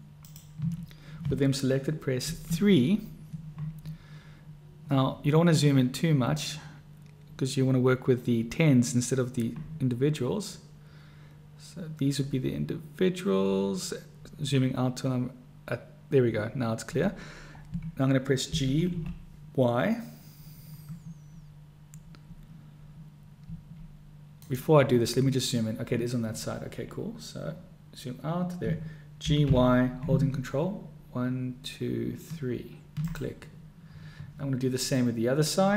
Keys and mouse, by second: 2.4 KP_3, 18.6 g, 29.4 g.